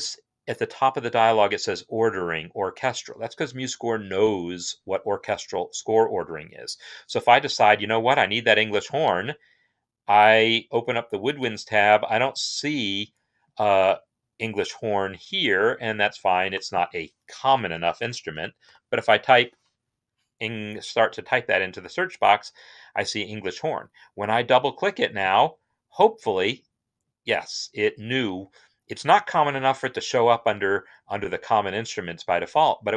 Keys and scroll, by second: 17.5-19.0 typing.